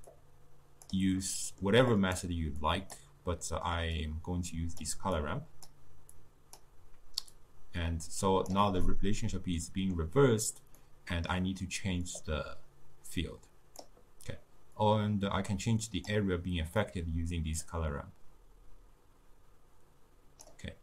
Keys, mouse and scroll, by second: 1.0-8.9 drag, 8.9-12.2 middle drag, 12.2-20.8 drag.